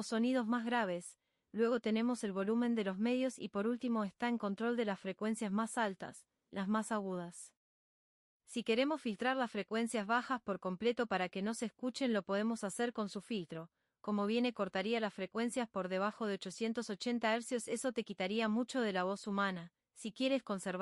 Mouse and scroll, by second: 3.4-9.7 drag.